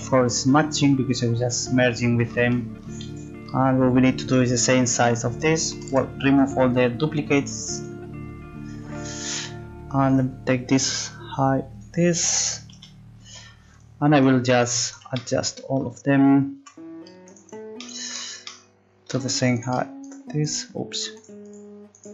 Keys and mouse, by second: 4.2-5.7 right drag, 5.7 a, 5.9 a, 9.0 right click, 11.3 click, 14.2 right click, 14.9 right click, 15.2 click, 16.6 z, 19.7 click, 20.1-22.1 right drag.